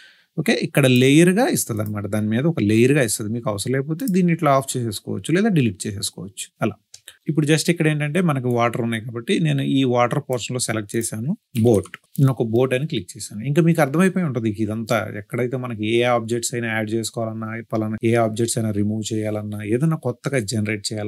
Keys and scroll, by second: 11.2-12.4 typing.